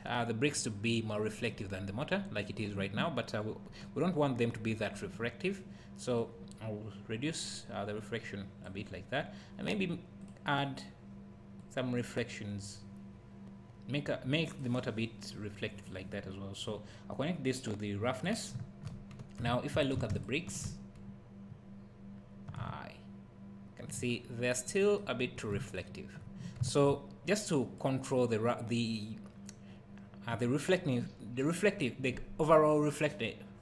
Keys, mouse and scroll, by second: 9.7 click, 16.7-20.4 drag, 22.1-22.6 scroll down 1, 22.6 `, 24.2-24.6 scroll down 1, 25.5 `, 27.3 click.